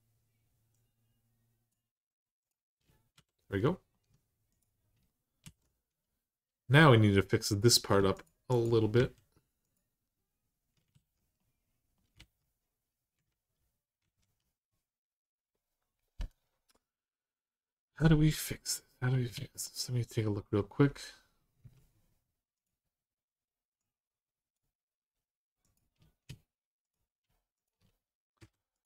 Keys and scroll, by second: 2.9 r, 5.2 r, 8.8 x, 10.7 alt+z, 12.0 alt+z, 13.0 ctrl+z, 13.8 ctrl+z, 19.1 alt+z, 21.4 1, 28.2 m.